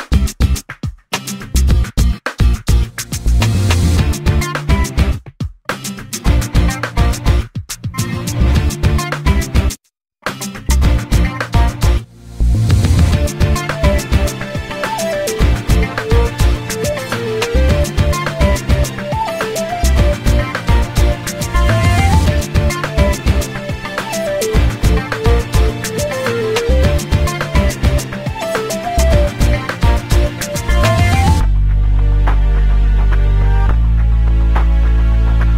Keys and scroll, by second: 7.4 Escape, 8.2 space, 11.2 p, 18.8 ctrl+x, 20.4 ctrl+z, 21.7 ctrl+z.